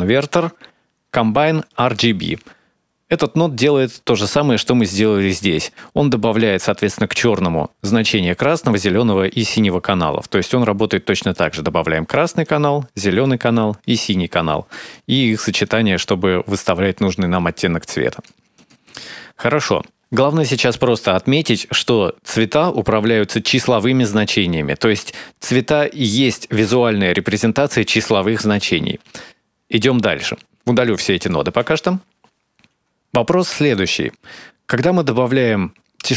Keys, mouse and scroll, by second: 9.2 click, 11.1 click, 12.2 click, 13.3 click, 14.7 click, 15.4 click, 17.0 click, 18.3 click, 30.5 click, 31.4 x, 32.6 click, 32.8 click, 32.9 x, 33.1 click, 34.4 click, 35.2 click, 35.7 click.